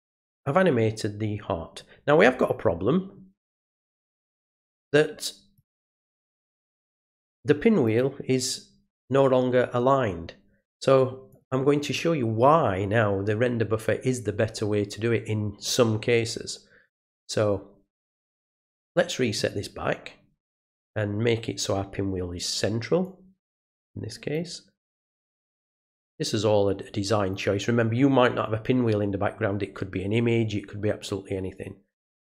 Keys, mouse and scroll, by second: 5.5 click, 7.8 click, 11.3 click, 16.8 click, 18.8 click, 23.0-24.3 drag, 25.2-27.3 drag, 31.0-32.2 drag.